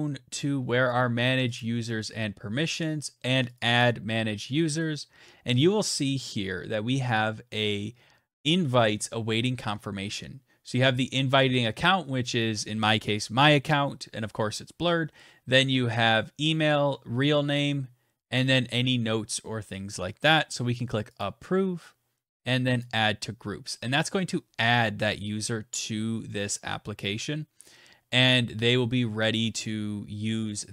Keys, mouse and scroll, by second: 0.2 click, 0.8 click, 2.8 click, 20.4 click, 22.0 click.